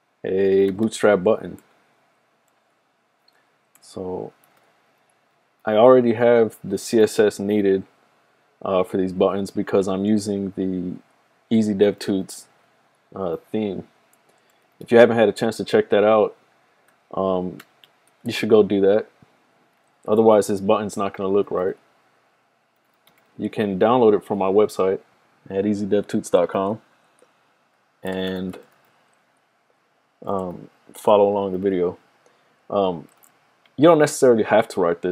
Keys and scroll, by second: 0.8 typing, 4.0-13.0 typing, 14.4-15.4 typing, 17.3-18.0 typing, 19.5-24.1 typing, 27.8-33.8 typing.